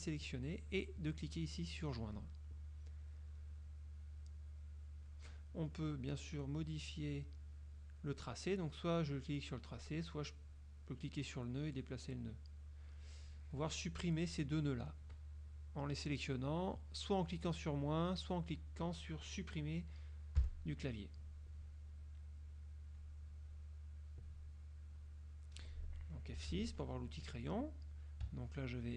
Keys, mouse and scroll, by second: 2.2 click, 4.3 click, 6.7-8.3 drag, 8.8 click, 10.6-13.0 drag, 13.3 click, 16.5 click, 20.5 Delete, 22.5 click, 23.6 click, 25.1 click, 26.5 F6.